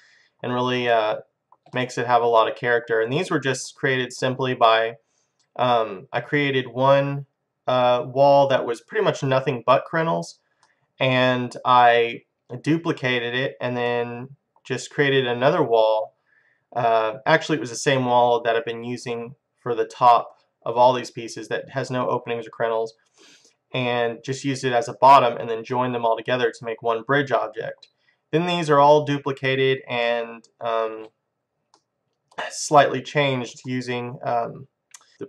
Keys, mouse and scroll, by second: 2.0 middle click, 3.4 scroll up 1, 6.2 middle click, 10.7-12.5 middle drag, 13.9-15.7 middle drag, 16.9-17.7 scroll down 1, 17.7-18.8 scroll down 1, 18.8-19.6 scroll up 1, 23.1 scroll up 1, 23.2-25.0 middle drag, 25.0-25.7 scroll down 1, 25.7-27.6 middle drag, 29.6-30.1 scroll up 1, 30.1-32.1 middle drag, 32.2-35.2 middle drag.